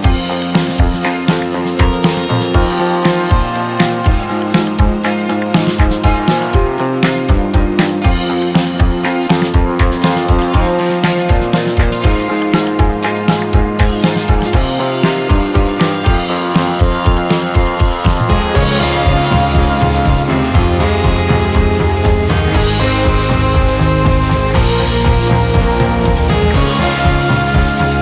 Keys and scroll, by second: 0.5 space, 1.9 space, 3.2 space, 5.7 z, 7.4 1, 9.0 s, 10.1 ctrl+z, 11.9 z, 16.4 Delete, 21.3 ctrl+z, 23.9 1, 27.2 space, 27.8 space.